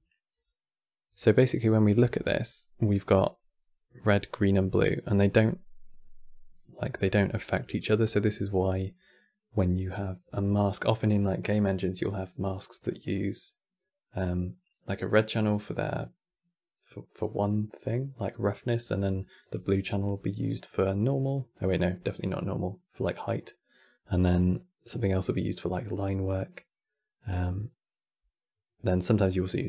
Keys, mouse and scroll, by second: 1.1 click.